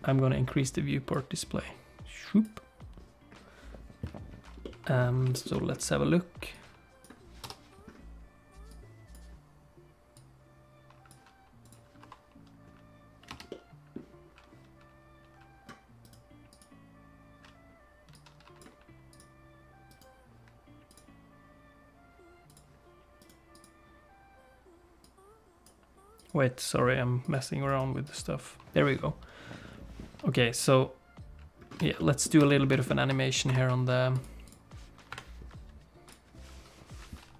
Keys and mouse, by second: 1.1-2.4 drag, 4.6 middle click, 5.3 shift+middle click, 5.5 middle click, 6.5 click, 7.4 KP_0, 8.7 click, 10.2 click, 11.6 click, 12.0 t, 13.3 space, 13.5 middle click, 16.0 right click, 18.1 click, 19.1 click, 19.9 right click, 20.9-22.7 drag, 23.2 right click, 25.0 click, 26.1 click, 27.2 click, 27.7 right click, 32.0 middle click, 32.4 space, 32.7 shift+middle click, 33.4 shift+F6, 34.1 click, 34.4 click, 35.1 KP_7, 36.1 click.